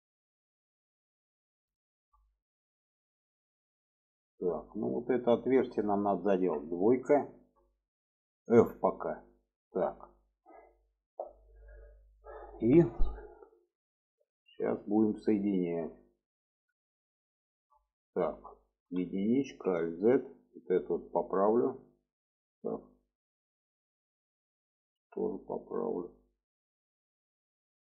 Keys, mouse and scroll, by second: 1.9 shift+click, 2.3 middle click, 3.3-4.9 middle drag, 5.4 middle click, 6.4 2, 7.2 alt+shift+click, 8.5 f, 9.1 click, 9.4 middle click, 10.4 middle click, 13.4-14.4 middle drag, 14.7 shift+middle click, 15.5 shift+middle click, 16.3 shift+middle click, 17.3 shift+middle click, 18.8 1, 19.4 alt+z, 20.0-20.7 drag, 21.4-23.5 drag, 24.0 click, 25.1-26.2 drag, 26.7 click.